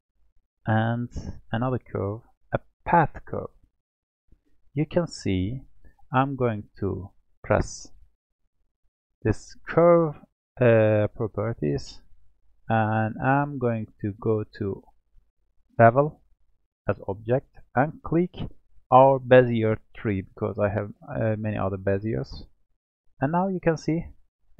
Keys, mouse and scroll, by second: 0.5-3.5 drag, 4.9-5.4 scroll up 2, 12.9-13.5 scroll up 6, 13.5-14.1 scroll down 3, 14.1-16.0 scroll down 6, 16.2 click, 17.7-20.9 drag, 23.3-24.5 middle drag.